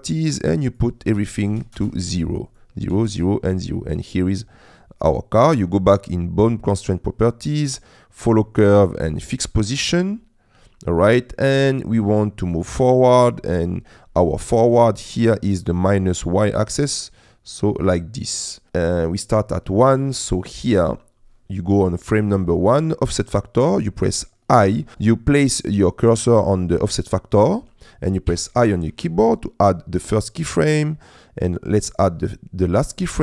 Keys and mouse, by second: 0.7-1.8 drag, 2.6 click, 5.6 click, 8.3 click, 9.1 click, 14.3 middle click, 16.7 click, 18.9 click, 28.3 i, 30.5-31.6 drag.